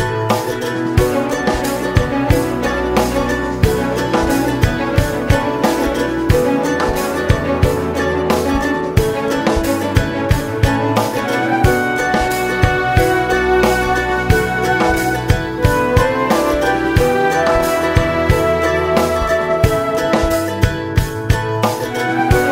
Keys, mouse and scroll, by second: 6.2 `, 6.6 scroll up 2, 6.8 `, 8.1 scroll up 2, 8.3 `, 8.9 scroll up 2, 9.0 `, 12.9 `, 14.8 `, 18.4-22.2 drag, 19.9 `, 20.2-21.1 scroll down 1, 21.1 KP_Divide, 21.4 alt+a.